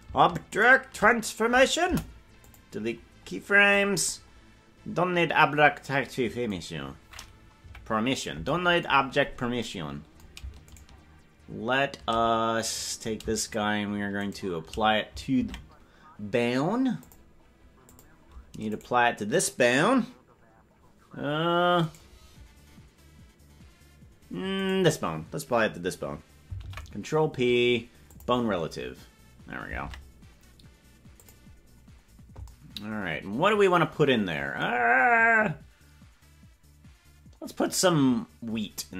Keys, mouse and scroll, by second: 1.8 Delete, 3.3-4.6 scroll down 1, 4.6-5.0 scroll down 9, 5.0-5.4 scroll up 4, 7.6 KP_Decimal, 10.7 shift+right click, 12.8 right click, 14.2 shift+right click, 15.4 ctrl+Tab, 16.9 click, 17.8 click, 18.7 right click, 26.5 ctrl+p, 26.5 right click, 31.1 ctrl+Tab, 31.1 click.